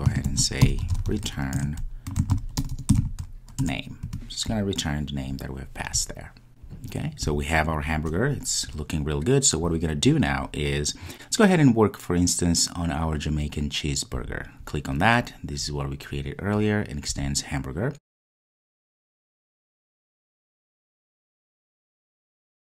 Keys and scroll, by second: 1.6 Return.